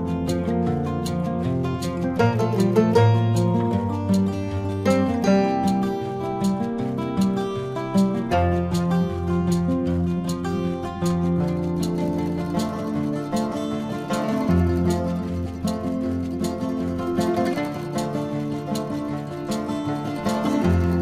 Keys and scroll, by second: 3.4 ctrl+alt+z, 4.0 ctrl+-, 5.3 ctrl+-, 9.4 ctrl+-, 9.8 ], 13.1 ctrl+=.